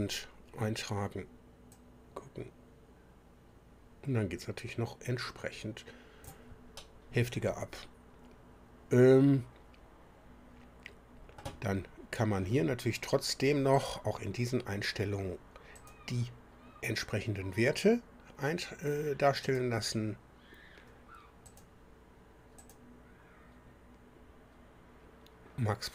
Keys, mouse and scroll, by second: 1.7-6.4 drag, 6.7-11.6 drag, 12.3 scroll up 1, 13.7 click, 15.7 click, 19.4 click, 21.4 click, 22.6 click.